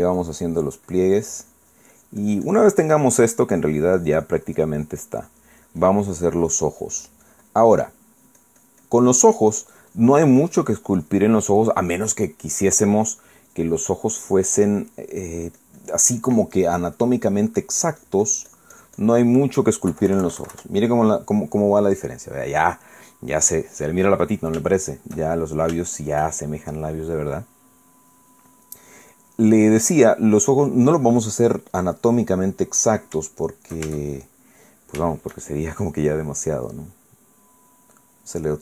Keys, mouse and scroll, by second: 3.3-7.1 drag, 7.5-9.1 drag, 10.9-12.9 drag, 12.9 middle click, 14.5 click, 15.2 click, 16.2-18.4 drag, 18.8-20.4 drag, 20.9 KP_Subtract, 21.6-25.4 middle drag, 25.8-26.8 shift+middle drag, 26.9-28.0 shift+middle drag, 29.5-31.9 middle drag, 33.0-34.1 middle drag, 35.2-36.5 shift+middle drag, 36.8 middle click, 37.5-38.6 drag.